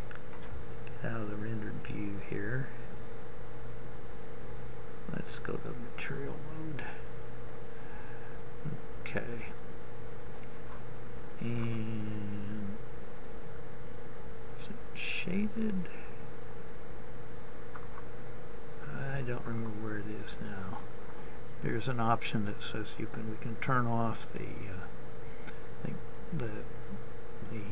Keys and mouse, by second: 14.0-15.6 middle drag, 21.2 middle click.